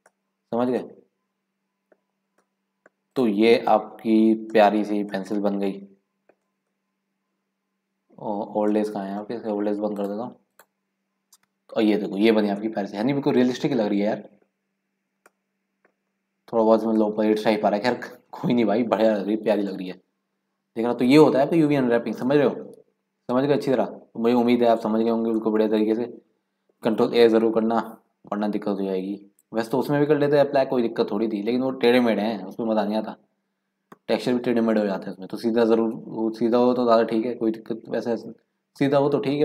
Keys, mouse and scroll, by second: 0.7 scroll up 2, 0.8-2.1 middle drag, 2.1 scroll down 4, 2.4 middle click, 3.1 click, 3.5 scroll up 4, 3.8 middle click, 4.3-5.0 scroll down 3, 5.0 scroll up 1, 5.2-6.4 middle drag, 6.4 scroll down 1, 6.7-7.1 scroll up 2, 7.1 middle click, 7.3-8.3 scroll down 1, 8.8-10.0 middle drag, 10.0 click, 10.5 click, 11.1-11.7 scroll up 1, 11.8-12.4 scroll up 2, 12.4 scroll down 2, 12.6 middle click, 13.5 scroll down 2, 13.7 scroll up 1, 13.7 middle click, 14.4-14.8 scroll down 1, 14.8 scroll up 2, 15.4 middle click, 17.0 middle click, 17.6-18.3 scroll down 2, 19.6 scroll up 1, 19.9 middle click, 20.5 scroll up 1, 21.2-21.7 scroll down 3, 22.5-23.4 scroll up 3, 23.4 scroll down 2, 23.7-25.2 middle drag, 25.2 scroll up 1, 25.3-27.0 middle drag, 27.0-27.8 scroll down 3, 27.8-28.3 scroll up 2, 28.3-29.4 scroll down 2, 29.4 click, 32.4-33.0 scroll up 3, 33.0-33.4 scroll down 3, 36.4-38.1 scroll up 4.